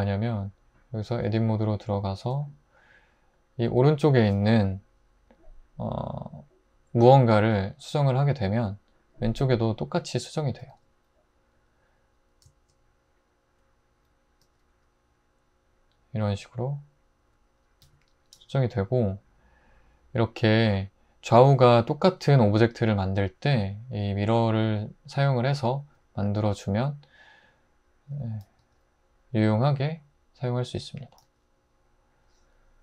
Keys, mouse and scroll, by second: 1.2 Tab, 7.9 g, 10.7 g, 14.4 g, 17.8 `, 18.4 g, 28.6 g, 31.3 g.